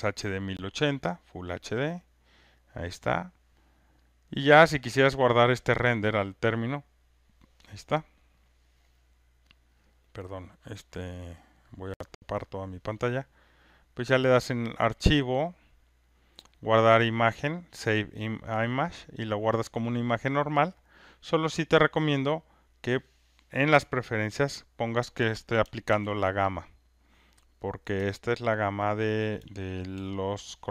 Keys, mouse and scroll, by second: 0.2 click, 4.1 click, 6.8 click, 7.0 click, 10.4 click, 11.8 click, 14.1 click, 22.4 click, 25.9 ctrl+F1, 26.6 click, 28.9 ctrl+click, 29.9 ctrl+F1.